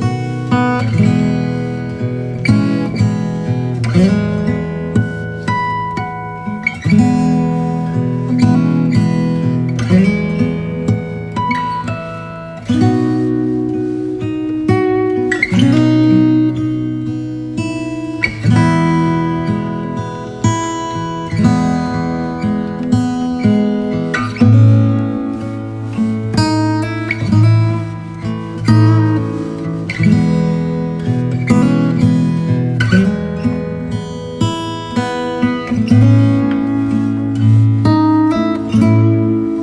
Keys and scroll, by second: 0.9 x, 2.9-4.5 typing, 5.9 x, 6.7 v, 8.4 space, 13.8 b, 14.6 x, 16.9-21.1 typing, 22.2 [, 23.1 ], 24.2 space, 24.9 space, 25.7 [, 28.2 space, 29.2 space, 30.2 space, 31.6 space, 33.0 space, 36.9 space, 37.8 v.